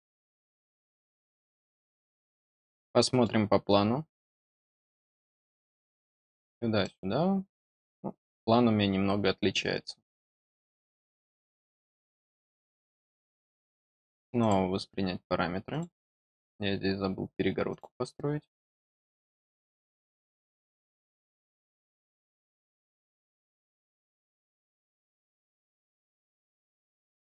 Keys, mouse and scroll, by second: 1.0 middle click, 2.3 scroll down 2, 2.7 middle click, 3.5 scroll down 2, 4.1 middle click, 4.8 scroll up 2, 5.1 middle click, 6.4 scroll down 2, 6.7-9.5 middle drag, 10.6 middle click, 11.6 middle click, 12.2 middle click, 12.9 scroll down 2, 14.3 click, 15.6 click, 17.6 click, 19.0 middle click, 19.9 scroll down 2, 20.9 click, 21.6 scroll down 2, 26.3 click.